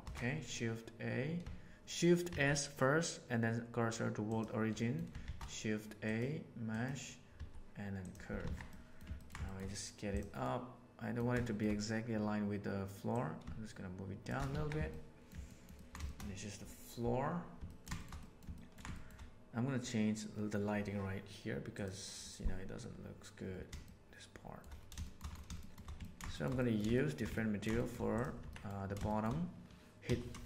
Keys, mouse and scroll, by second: 2.2 shift+s, 4.7 middle click, 5.1 shift+a, 7.3 s, 8.4 alt+a, 8.6-9.0 middle drag, 9.1 ctrl+middle click, 9.4 shift+middle click, 10.4 middle click, 11.3 shift+middle drag, 13.1 shift+click, 14.5 alt+a, 14.8-15.2 middle drag, 15.4 ctrl+middle click, 15.7 ctrl+middle click, 16.0 shift+middle click, 17.6 ctrl+middle click, 17.9 shift+middle click, 18.1 middle click, 18.5 ctrl+middle drag, 18.9 shift+middle click, 23.8-24.5 shift+middle drag, 24.9 shift+middle drag, 25.5 shift+middle click, 25.9 ctrl+middle click, 26.3 shift+middle click, 26.5 middle click, 26.9 shift+middle drag, 27.3 ctrl+middle drag, 27.7 shift+middle click, 28.3 Tab, 28.4 middle click, 29.0 shift+middle click, 30.0 3.